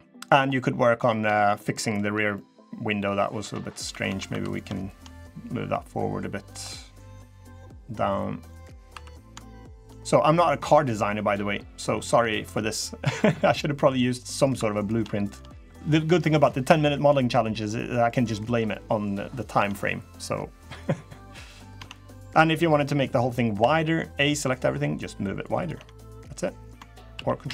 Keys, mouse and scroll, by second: 0.3 middle click, 1.0 Tab, 1.3 middle click, 1.8 scroll down 2, 2.1 middle click, 3.1 scroll up 1, 3.3 Tab, 3.6 2, 3.8 Tab, 4.0 2, 4.2 click, 4.6 shift+click, 5.0 click, 6.4 middle click, 7.2 click, 8.7 2, 8.9 click, 9.4 shift+click, 10.3 click, 11.1 click, 11.7 shift+click, 13.1 scroll down 1, 13.3 middle click, 13.9 middle click, 14.3 2, 14.5 click, 15.0 shift+click, 15.4 scroll up 2, 15.6 middle click, 15.6 scroll down 1, 17.5 middle click, 18.5 middle click, 19.0-19.5 scroll down 2, 19.3 Tab, 19.5 middle click, 20.0 scroll down 2, 20.3 middle click, 20.8-21.2 scroll up 4, 21.2 middle click, 21.5 Tab, 22.0 middle click, 22.5-23.0 scroll down 4, 23.0 scroll up 2, 23.3 a, 24.2 click, 25.3 click, 25.5 Tab, 25.9 middle click, 26.9 ctrl+z, 27.2 ctrl+z.